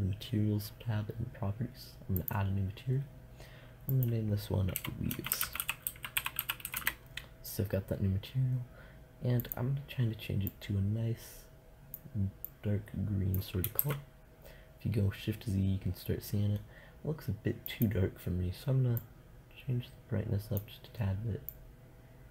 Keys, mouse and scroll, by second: 0.5-2.4 middle drag, 5.8-9.6 middle drag, 14.0 shift+z, 16.8-17.8 middle drag, 17.8-19.7 drag.